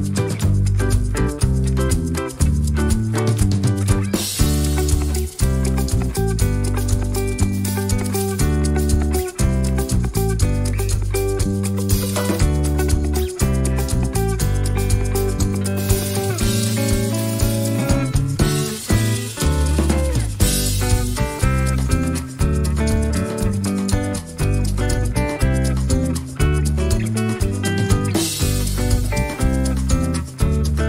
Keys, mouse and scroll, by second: 2.0 click, 3.3-5.2 ctrl+shift+drag, 5.6 ctrl+shift+click, 6.0 ctrl+shift+click, 7.2 shift+click, 8.7 ctrl+shift+click, 10.2-11.3 drag, 11.5-12.6 ctrl+shift+drag, 13.2 ctrl+shift+d, 14.0 click, 15.1 click, 15.8-17.1 ctrl+drag, 18.2 ctrl+d, 18.9 ctrl+shift+d, 18.9-20.4 ctrl+shift+drag, 20.7-21.9 ctrl+shift+drag, 22.6 click, 23.3-23.6 scroll up 2, 24.2 ctrl+shift+click, 25.2-26.9 ctrl+shift+drag, 25.7 space, 27.0 click, 27.9 ctrl+d.